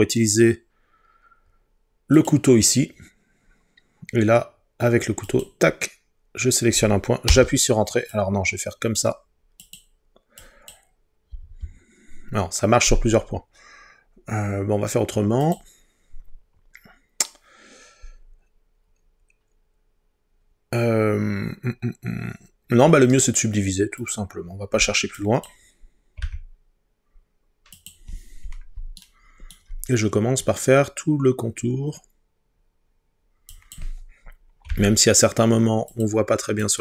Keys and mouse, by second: 2.2 click, 5.3 click, 7.3 Return, 9.7 click, 10.4 click, 11.4 Return, 15.5 click, 23.2 right click, 24.1 click, 26.2 g, 27.8-28.8 drag, 34.7 g, 35.9-36.8 drag.